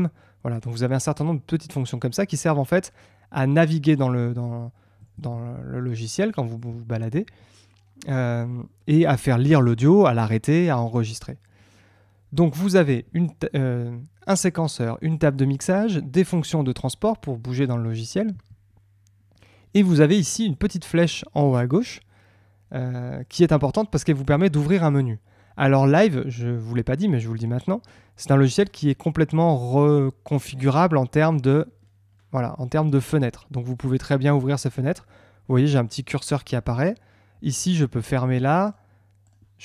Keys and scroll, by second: 5.1 Tab, 6.6 space, 12.8 Tab, 18.3 Tab.